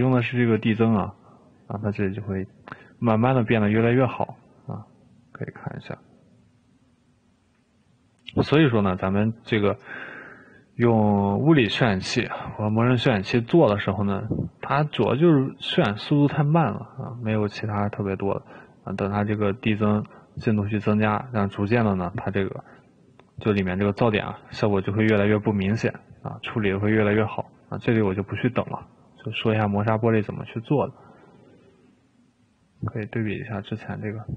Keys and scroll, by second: 31.6 Escape.